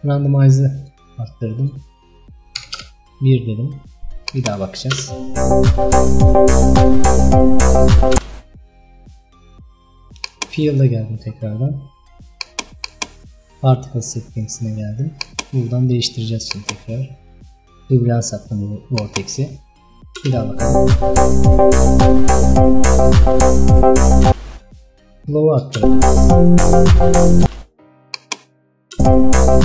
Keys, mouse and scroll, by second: 0.1-4.8 drag, 4.8 space, 8.2 space, 10.3 click, 19.0-20.1 drag, 20.1 space, 24.4 space, 24.9 click, 25.9 space, 27.5 space, 28.2 click, 29.0 space.